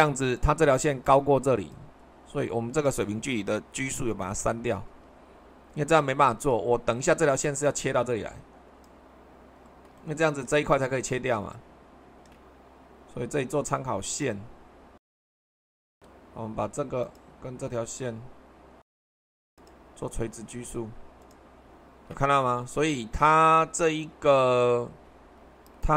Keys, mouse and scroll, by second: 4.2 Delete, 14.1 click, 15.5 click, 15.9 Escape, 19.5-20.7 drag, 21.2-24.0 drag, 25.3 super+1.